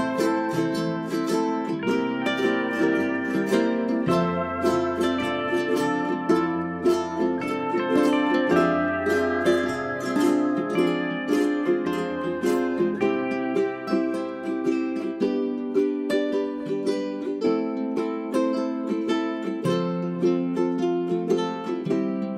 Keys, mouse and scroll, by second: 0.0 Delete, 0.3-2.4 drag, 0.6 Delete, 2.4-3.7 scroll up 1, 3.7-7.6 drag, 9.4-12.5 drag, 12.8 1, 13.4 click, 13.7-14.7 scroll down 1, 14.7 click, 16.0 middle click, 17.0-17.4 scroll up 1, 17.4 click, 18.1-18.9 scroll up 1, 18.7-19.6 typing, 19.8-20.4 scroll up 1, 20.4 click.